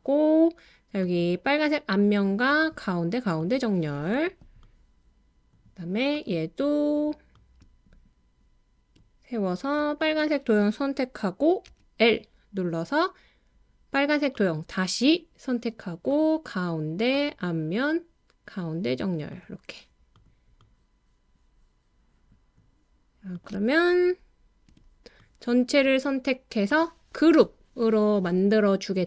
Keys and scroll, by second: 11.7 l, 24.7 BackSpace.